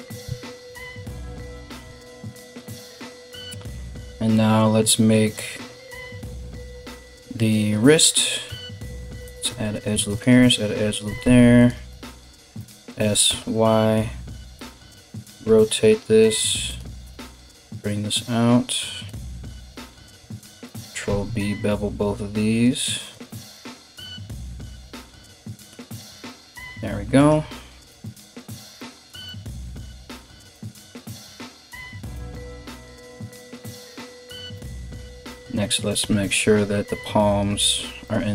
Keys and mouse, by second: 0.4 alt+right click, 1.1 g, 8.6 ctrl+r, 10.7 g, 11.5 alt+right click, 11.6-16.6 alt+middle drag, 12.2 s, 14.5 r, 16.6-19.2 right drag, 16.6 g, 19.2 alt+middle click, 19.3 right click, 19.4 alt+middle click, 20.0 alt+shift+right click, 20.0-34.8 alt+shift+middle drag, 20.7 ctrl+b, 22.9 Tab, 25.5 Tab, 26.8 right click, 27.4 g, 29.3 g, 30.4 g, 31.7 Tab, 34.1 Tab, 34.8 right click, 34.9-38.3 middle drag, 35.6 g.